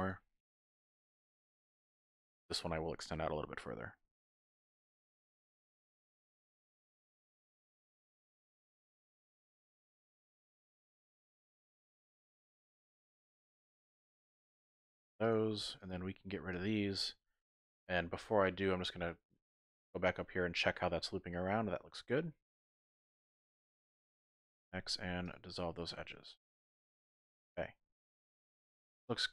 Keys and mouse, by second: 2.1 click, 2.5 middle click, 4.1 middle click, 4.8 k, 11.9 middle click, 13.3 2, 13.8 alt+click, 14.4 alt+shift+click, 14.7 x, 16.6 alt+shift+click, 17.7 click, 18.4 shift+click, 19.6 shift+click, 20.3 shift+click, 21.1 typing, 21.3-23.2 drag, 24.6 x, 25.8 click, 27.2 shift+click, 28.0 shift+click, 29.0 alt+click.